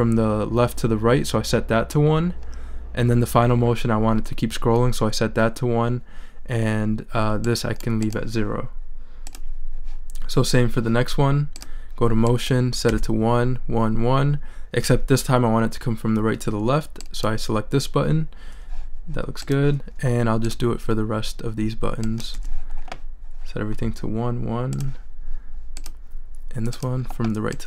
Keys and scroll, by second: 12.9 i, 22.3 i.